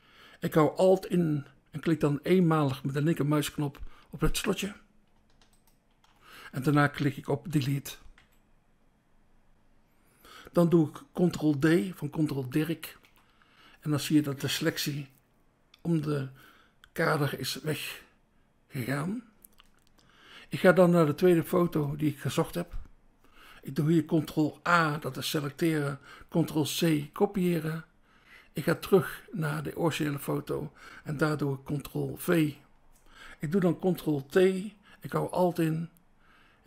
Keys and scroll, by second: 4.1 BackSpace, 8.1 Delete, 12.9 ctrl+d, 21.8 BackSpace, 24.7 ctrl+a, 26.8 ctrl+c, 32.2 ctrl+v, 33.8 ctrl+t.